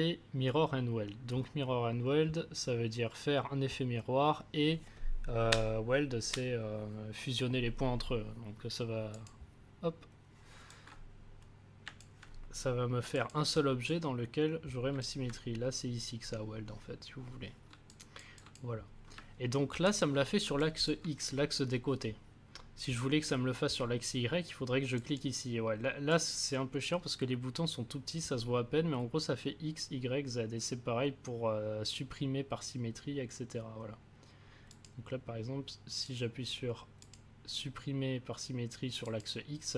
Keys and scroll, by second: 19.7 ctrl+z.